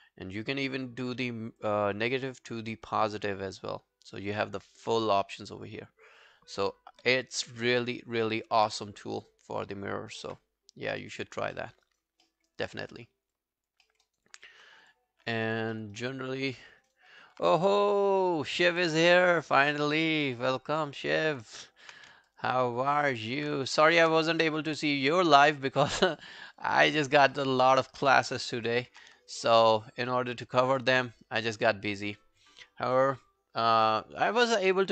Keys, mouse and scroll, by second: 7.1 w, 7.6 alt+middle click, 8.0 alt+click, 9.2 double click, 9.6 double click, 10.3 Delete, 10.7-11.4 scroll down 1, 11.6 alt+middle click, 11.9 alt+right click, 12.3 alt+middle click, 12.5 alt+right click, 12.8 alt+middle click, 13.1 alt+scroll down 1, 13.4 alt+click, 13.9 alt+middle click, 14.1 alt+right click, 14.3 alt+click, 15.2 scroll down 3, 15.4 alt+click, 15.7 alt+middle click, 16.0 alt+right click, 16.6 alt+middle click, 16.8 alt+right click, 20.3 right click, 21.4 scroll down 2, 21.6 alt+click, 22.0 q, 22.3 alt+click, 22.7 alt+middle click, 22.9 alt+right click, 23.2 alt+click, 23.8 shift+click, 24.2 scroll down 1, 24.4 alt+middle click, 24.7 alt+right click, 24.9 alt+click, 25.3 alt+scroll down 1, 25.5 alt+click, 26.2 alt+scroll up 2, 26.4 alt+middle click, 26.6 alt+scroll down 1, 26.6 alt+right click, 26.9 alt+click, 27.3 alt+middle click, 27.6 alt+right click, 27.8 alt+click, 28.3 alt+middle click, 28.5 alt+right click, 28.7 alt+click, 29.3 shift+right click, 30.8 alt+middle click, 31.0 alt+right click, 31.2 alt+click, 31.6 alt+middle click, 31.8 alt+right click, 33.8 alt+right click.